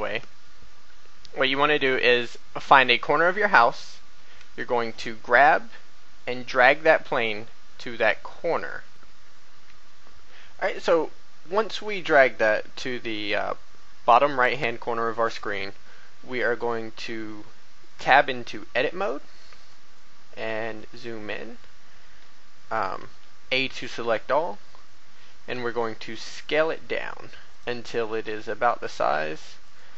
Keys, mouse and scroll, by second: 8.9 click, 9.7 click, 17.9 Tab, 18.5-19.1 scroll up 1, 19.9 shift+middle click, 22.9 a, 25.5 s, 27.5 click, 28.0 g, 29.6 click.